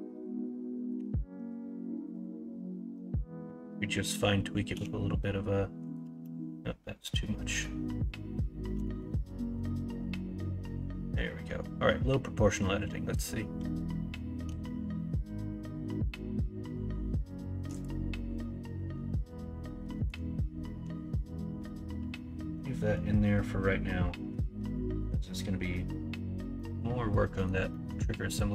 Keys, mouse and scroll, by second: 0.9 o, 4.7 g, 6.1 ctrl+z, 8.7 g, 26.5 middle click, 27.8 middle click.